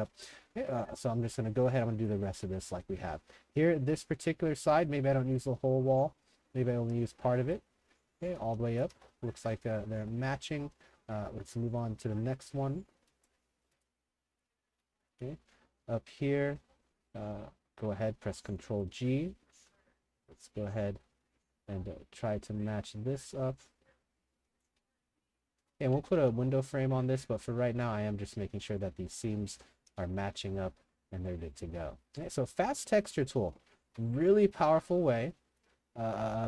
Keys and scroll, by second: 0.0-1.8 typing, 2.3 ctrl+g, 8.1-10.6 typing, 14.7 a, 16.8 w, 17.7 ctrl+g, 25.0-26.6 typing, 28.4-30.4 typing, 32.1 3, 32.7 w, 33.3 s, 33.8 ctrl+g.